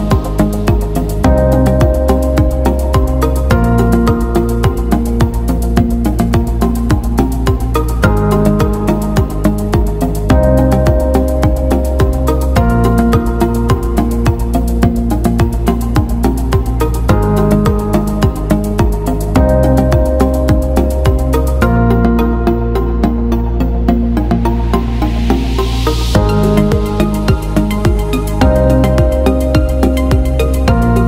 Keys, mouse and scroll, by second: 0.5 click, 8.1 click, 14.7 click, 23.2 click, 24.6 shift+click, 26.1 click, 26.9 alt+click, 27.6 click.